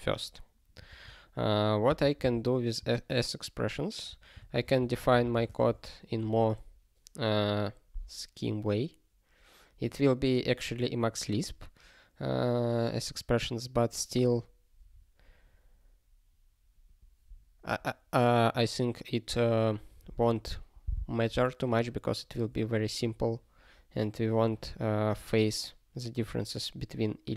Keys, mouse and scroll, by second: 0.8 click, 1.9 Return, 2.0 ctrl+p, 2.2 Return, 4.4-5.6 typing.